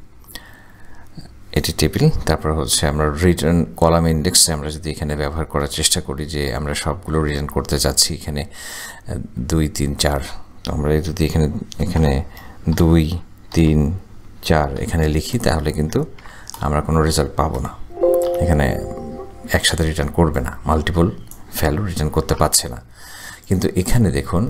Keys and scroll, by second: 2.6 ,, 13.0-14.8 typing, 16.2 shift+0, 17.6 Return, 22.4 Delete.